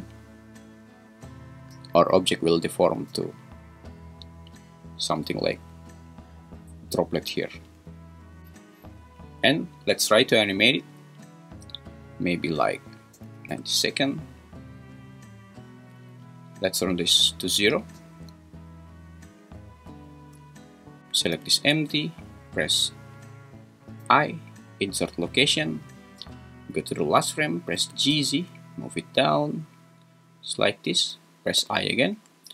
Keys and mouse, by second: 5.5 `, 7.8 `, 10.2-11.4 drag, 12.6 click, 17.3 click, 21.3 g, 21.8 Escape, 24.0 i, 26.7 shift+Right, 27.8 g, 28.1 z, 31.6 i.